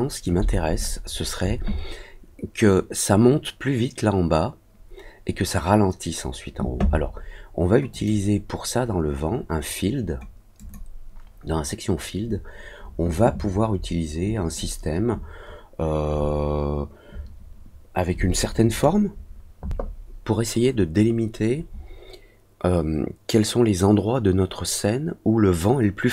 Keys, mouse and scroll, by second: 7.9 click, 10.5 click.